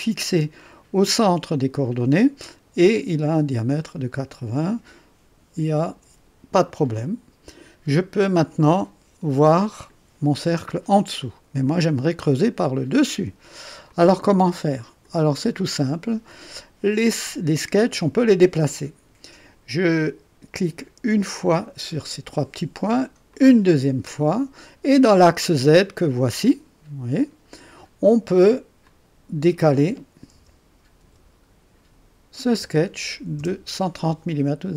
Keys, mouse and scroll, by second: 6.9 click, 8.3-10.1 drag, 11.2 click, 12.0 click, 13.9-15.3 drag, 15.4 click, 21.4 click, 23.3 click, 28.8 click, 30.3 KP_1, 32.5 KP_0, 33.3 KP_Enter.